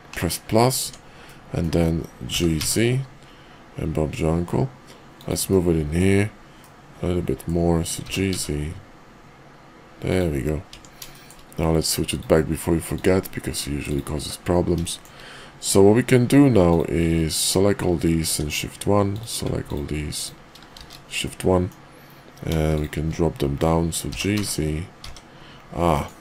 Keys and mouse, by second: 0.7 Tab, 1.2 middle click, 2.3 g, 5.5 middle click, 6.5 middle click, 7.9 g, 10.7 Tab, 11.1 shift+click, 11.9-14.2 drag, 14.2 middle click, 14.8 shift+middle click, 17.2 ctrl+click, 18.2 shift+1, 19.6 ctrl+click, 20.0 ctrl+click, 20.6 shift+1, 21.2 middle click, 23.9 g.